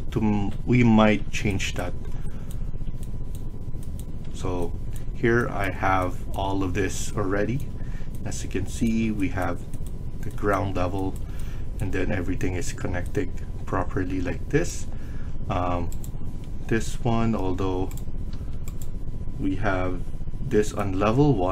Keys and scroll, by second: 18.3 Escape.